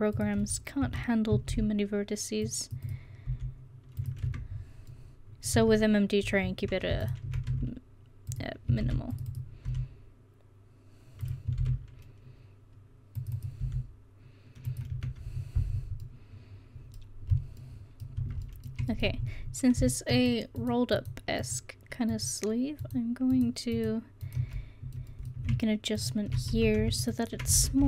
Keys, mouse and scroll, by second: 0.4 Tab, 0.9 Tab, 1.5 ctrl+r, 3.3 s, 4.3 Tab, 5.6 Tab, 7.5 s, 8.9 ctrl+r, 9.7 s, 11.6 ctrl+r, 13.7 s, 15.0 Tab, 18.2 Tab, 24.8-26.0 middle drag, 26.6 ctrl+z, 27.6 ctrl+z.